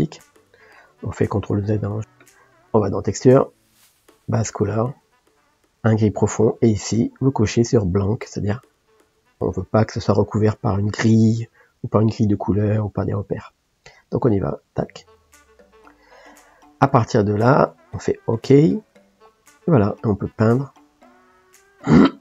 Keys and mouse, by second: 1.8 ctrl+z, 2.0-14.7 middle drag, 14.7 click, 19.3-20.3 middle drag, 20.3-22.2 drag.